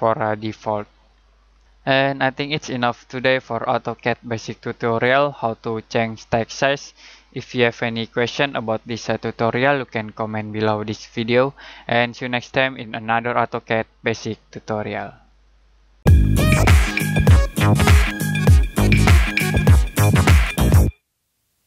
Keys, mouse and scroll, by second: 1.1-1.6 scroll down 1.